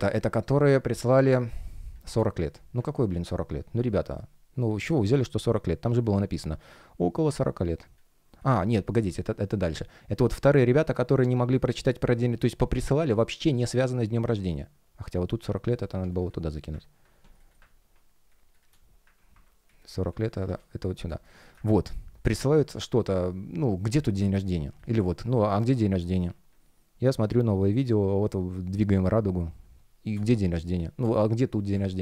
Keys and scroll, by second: 3.7 space, 9.1 space, 14.1 space, 17.3 shift+Return, 18.2 space, 19.1 super+x, 19.6 space, 21.0 space, 24.1 space, 30.0 space.